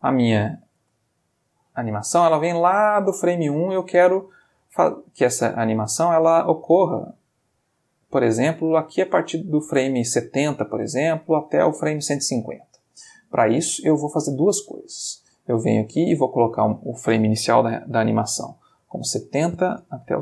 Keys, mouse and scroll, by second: 0.8 space, 6.5 click, 9.7 space, 13.6 click, 15.0 click, 16.6 click, 18.7-20.2 typing.